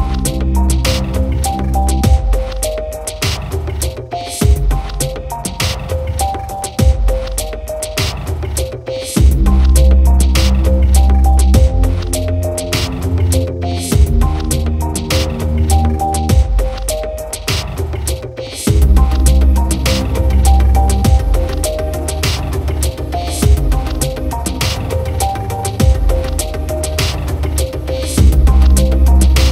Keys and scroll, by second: 24.4 ctrl+t.